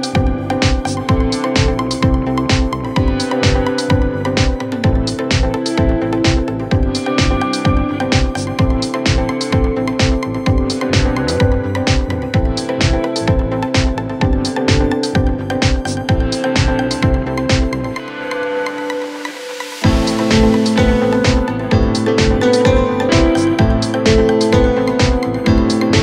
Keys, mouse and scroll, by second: 0.1-0.6 scroll down 1, 0.6 click, 1.2 scroll up 3, 1.3 middle click, 1.7 scroll down 1, 1.8 ctrl+r, 3.1 click, 3.2 middle click, 3.9-4.2 scroll down 2, 4.2 ctrl+r, 5.3 Escape, 5.4 click, 5.5 scroll up 2, 5.6 middle click, 5.8 scroll down 1, 6.1 middle click, 6.6 scroll up 5, 6.8 middle click, 7.0-7.8 scroll down 1, 7.8 alt+x, 9.0 ctrl+z, 9.4 alt+x, 9.8 middle click, 10.4-10.8 scroll down 2, 10.8 ctrl+r, 12.0 Escape, 12.0 Escape, 12.1 middle click, 12.3 click, 12.4-12.9 scroll down 6, 12.9 ctrl+r, 13.8 Escape, 14.0 click, 14.1 scroll up 3, 14.2 middle click, 14.7 scroll up 8, 14.8 middle click, 15.3 scroll down 6, 15.6-16.6 scroll up 1, 16.8 click, 17.0 middle click, 17.2-17.7 scroll down 2, 17.7 ctrl+r, 19.1 click, 19.2 scroll up 1, 19.3 middle click, 20.0-20.4 scroll down 2, 20.4 ctrl+r, 21.6-21.9 scroll up 4, 21.6 middle click, 21.8 click, 21.9 middle click, 22.9 Tab, 23.2 click, 23.3 middle click, 23.5 scroll up 3, 23.6 scroll down 10, 23.9 scroll up 1, 24.0-24.6 middle drag, 24.6 scroll down 1, 25.6-26.0 drag.